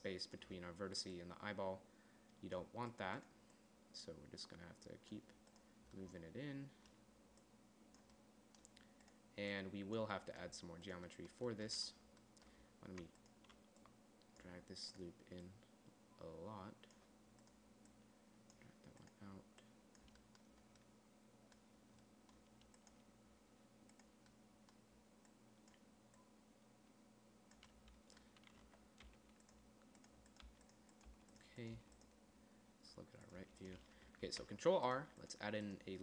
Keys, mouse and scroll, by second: 6.6 middle click, 7.8-9.8 middle drag, 10.8-12.9 middle drag, 20.6-22.2 middle drag, 23.8 middle click, 25.7 middle click, 29.1 z, 29.5 g, 30.9 g, 31.5 g, 32.2 g, 33.8 g, 34.7 ctrl+r.